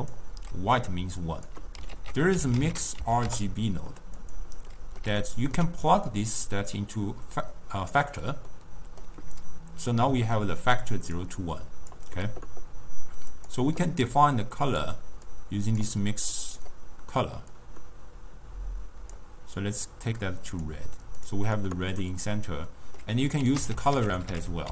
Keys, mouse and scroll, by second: 0.2 d, 1.0 d, 1.3 click, 1.6 d, 2.0 ctrl+a, 5.0-6.2 middle drag, 6.2-8.6 drag, 8.6-10.3 middle drag, 10.3 d, 10.7 d, 10.8 click, 11.2 d, 11.5 click, 12.0-12.3 d, 13.4 click, 16.5 click, 21.3 click, 22.5-23.5 middle drag, 23.5 ctrl+a.